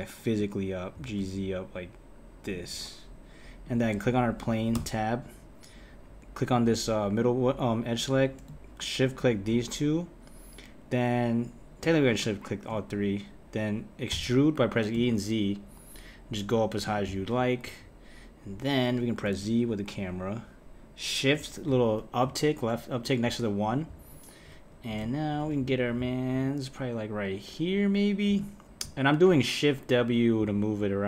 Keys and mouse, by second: 0.9 g, 3.6 click, 4.7 Tab, 6.5-8.0 drag, 9.0 shift+click, 12.1 shift+click, 14.1 e, 17.6 KP_1, 19.3 KP_0, 21.6 `, 23.4 `.